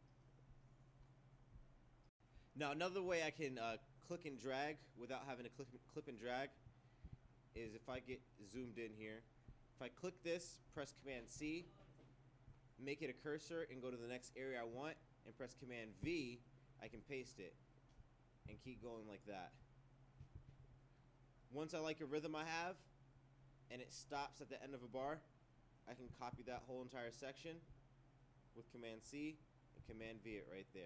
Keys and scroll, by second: 7.1 ctrl+2, 7.6 ctrl+3, 8.0 ctrl+4, 11.1 super+c, 16.0 super+v, 26.3 super+c, 29.9 super+v.